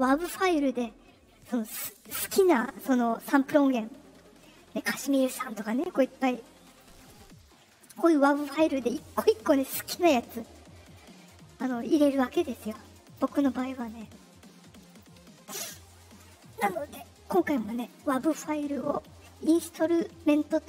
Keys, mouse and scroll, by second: 0.0 click, 1.6 click, 3.2 click, 5.0 click, 6.6 click, 13.0 click, 13.7 click, 14.8 click.